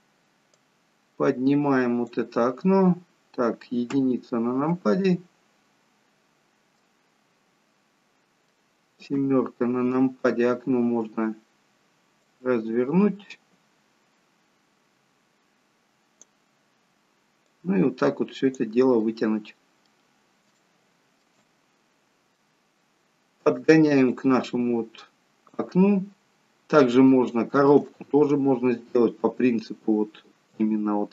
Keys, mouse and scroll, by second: 0.5 click, 2.7-3.8 scroll down 3, 3.9 KP_1, 5.1-5.8 scroll down 1, 6.8 middle click, 9.2 KP_7, 17.5 click, 19.1 middle click, 20.1-20.6 scroll up 3, 20.6 shift+middle click, 21.9 middle click, 22.6-23.2 scroll down 1, 24.1 click, 25.9-26.5 scroll down 2, 26.6-27.0 scroll up 1, 27.2 shift+middle click.